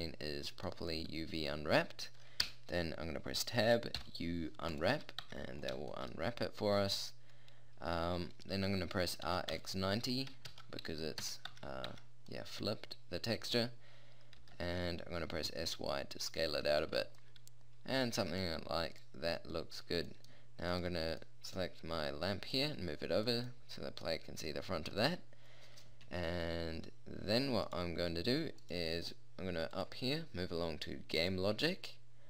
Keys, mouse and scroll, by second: 2.5 Tab, 4.0 u, 5.2 Tab, 5.5 middle click, 9.3 r, 11.6 Tab, 11.9 Tab, 14.4 s, 16.9 a, 26.8-27.7 middle drag.